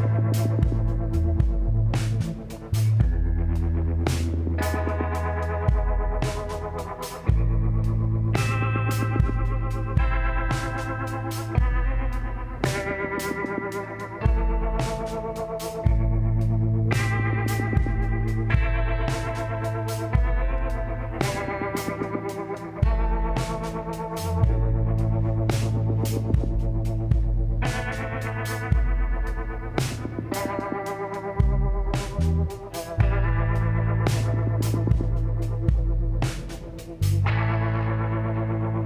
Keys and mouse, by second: 1.0 f, 2.4 KP_1, 2.8-3.8 drag, 4.4-6.1 drag, 8.3-15.2 drag, 16.3 z, 17.4-19.2 drag, 20.8 z, 21.6 s, 24.3-27.0 drag, 25.8-27.9 middle drag, 27.9-29.9 drag, 27.9 e, 30.3 click, 30.7 a, 31.5 click, 34.0-37.8 drag, 37.8-38.8 middle drag.